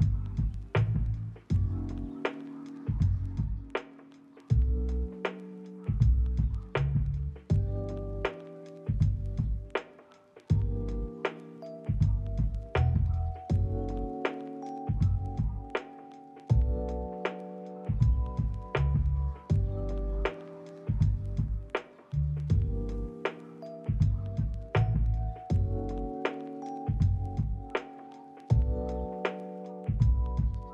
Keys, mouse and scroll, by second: 0.5 middle click, 1.3 shift+middle click, 1.9 double click, 7.8 ctrl+middle click, 8.0 middle click, 8.3 ctrl+middle click, 8.6 shift+middle click, 9.0 double click, 12.2 ctrl+middle click, 14.4 double click, 15.6 ctrl+middle click, 15.8 middle click, 17.0 ctrl+middle click, 17.3 ctrl+middle click, 17.6 s, 18.1 double click, 20.6 ctrl+middle click, 20.8 middle click, 21.2 ctrl+middle click, 22.4 ctrl+middle click, 22.6 s, 23.1 double click, 25.0 ctrl+middle click, 25.8 ctrl+middle click, 26.0 middle click, 27.2 ctrl+middle click, 28.1 middle click, 28.6 s, 28.8 right click, 29.5 KP_3, 29.6 KP_0, 29.7 Return, 30.3 double click.